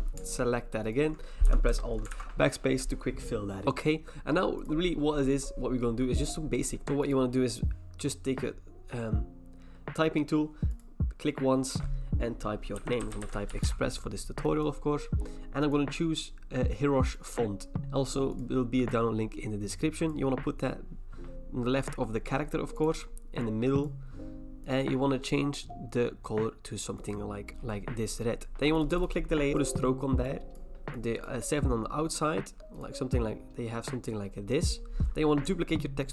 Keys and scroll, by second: 1.7 alt+BackSpace, 2.1 ctrl+d, 12.8-13.6 typing.